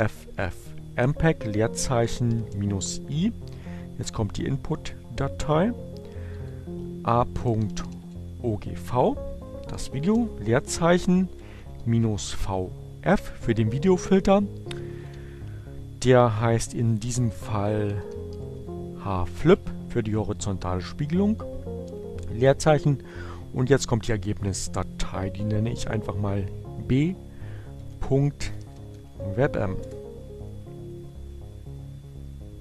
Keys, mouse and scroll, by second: 1.6 -, 1.8 space, 4.3 a, 6.6-7.6 typing, 9.2 space, 9.6 v, 11.4 f, 11.9 space, 14.6 shift+2, 16.5-18.4 typing, 19.7 space, 24.7 b, 27.1 ., 27.6 b, 28.7 m, 29.1 Return.